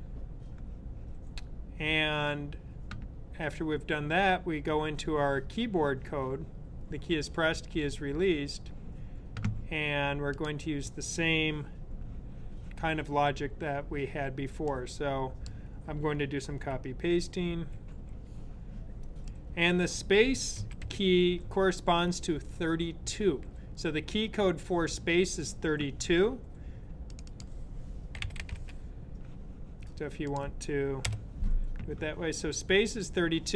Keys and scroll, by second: 16.3 super+c, 17.4 super+v, 20.1-21.1 typing, 27.7-28.8 typing.